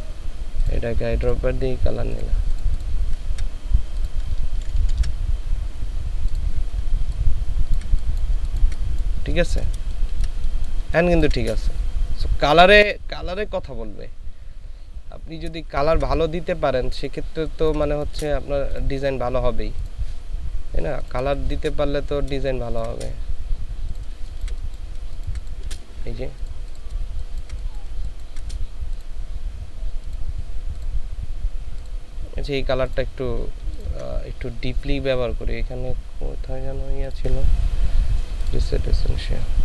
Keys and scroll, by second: 4.8 ctrl+shift+[, 7.0 ctrl+space, 9.9 ctrl+space, 15.7 ctrl+space, 17.2 ctrl+space, 21.4 space, 22.4 ctrl+space, 24.1 ctrl+space, 25.0 ctrl+space, 27.1 ctrl+space, 27.9 ctrl+space.